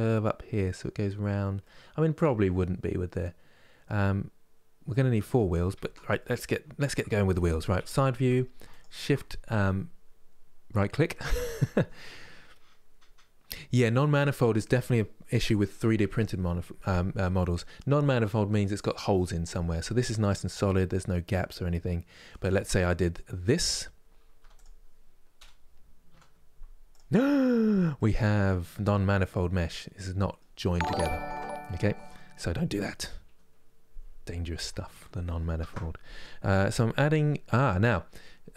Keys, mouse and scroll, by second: 5.5 Tab, 5.9-7.5 middle drag, 7.5 KP_3, 8.4-11.4 shift+right drag, 19.5-22.0 middle drag, 22.0-22.4 scroll up 1, 22.4 Tab, 23.2 click, 24.1 3, 24.2-25.8 drag, 25.8 Delete, 27.7-30.9 middle drag, 30.9 ctrl+z, 31.4-32.9 middle drag, 32.9 KP_3, 35.3 shift+a.